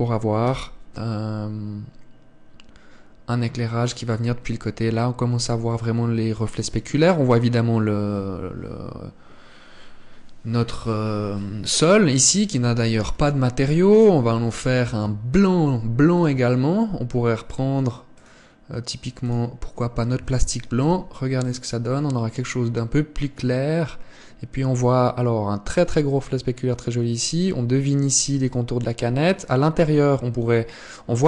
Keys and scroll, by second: 13.2 Escape.